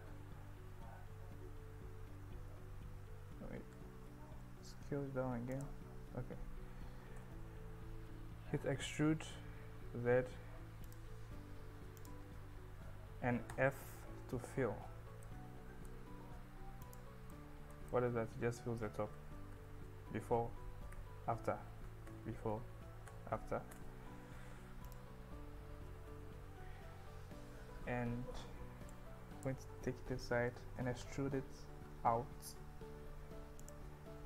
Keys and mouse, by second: 2.1 s, 2.9 Tab, 3.3 Escape, 3.7 Tab, 4.4 s, 5.6 click, 6.0 Tab, 7.2 e, 9.1 z, 10.9 click, 12.0 click, 15.0 Tab, 15.2 middle click, 16.9 click, 17.4 middle click, 17.9-18.8 middle drag, 19.2 ctrl+z, 21.0 f, 22.1 ctrl+z, 23.1 f, 23.8 Tab, 24.9 click, 25.4 Tab, 26.1 KP_1, 29.0 click, 30.8 e, 31.1 s, 33.6 click.